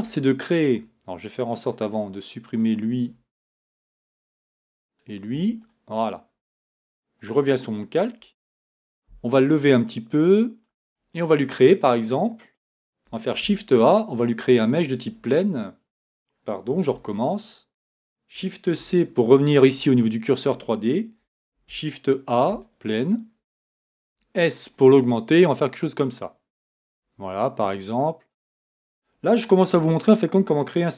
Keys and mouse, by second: 3.8 x, 5.3 x, 8.6 right click, 13.3 shift+a, 18.8 shift+c, 21.5 shift+a, 24.0 s, 29.7 Tab.